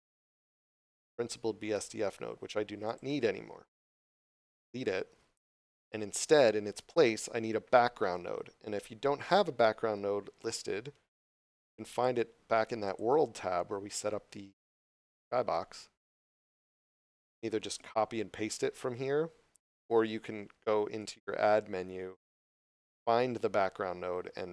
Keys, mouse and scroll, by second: 0.0 scroll up 1, 1.1 scroll up 1, 2.0 scroll up 1, 2.9 click, 3.5 scroll down 1, 10.4 click, 13.6 scroll down 1, 16.2 scroll up 1, 16.6 shift+middle click, 17.2 scroll up 1, 17.7 click, 21.0 click.